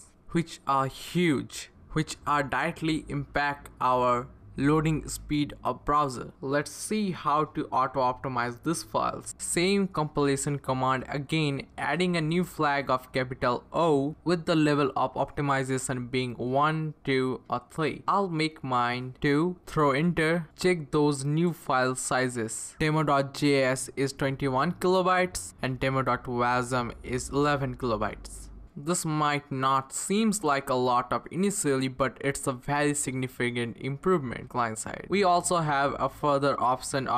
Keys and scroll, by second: 1.2 Up, 3.3 Up, 3.9 Left, 4.1 Left, 4.3 Left, 4.4 Left, 4.6 Left, 4.8 Left, 5.0 Left, 5.1 Left, 5.6 Left, 6.2 Left, 7.1 Left, 8.5 Left, 8.8 Left, 9.5 Right, 9.8 Right, 10.0 Right, 10.2 Right, 10.5 Right, 13.8-18.3 typing, 14.2 Left, 19.0 Tab, 19.9 Return, 22.2 Up, 22.4 Return.